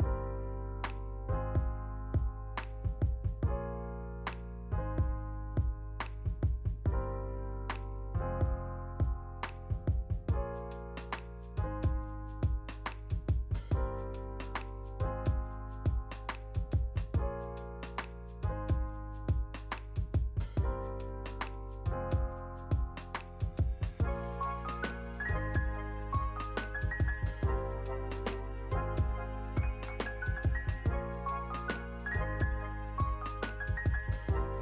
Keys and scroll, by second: 5.6 r, 7.0 ctrl+s, 20.5 n, 27.0 space, 31.2 space, 31.6 ctrl+s.